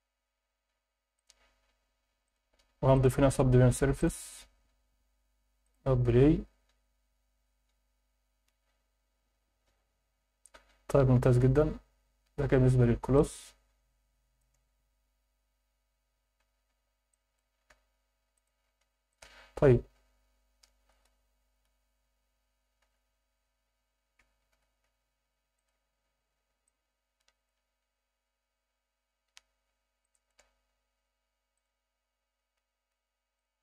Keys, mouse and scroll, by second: 0.0-0.4 scroll up 1, 1.1 click, 2.2 click, 2.9-4.1 drag, 5.6 click, 13.4-14.6 alt+middle drag, 15.3 scroll up 1, 16.4 Escape, 16.7-17.1 scroll down 2, 17.1 alt+middle drag, 17.7 s, 18.4 click, 18.6 ctrl+a, 21.0 KP_1, 22.8 g, 24.2 Escape, 24.5 g, 24.9 z, 25.6 click, 26.3 scroll down 1, 26.6-27.5 alt+middle drag, 30.0 alt+middle click, 31.5 click, 33.4 drag.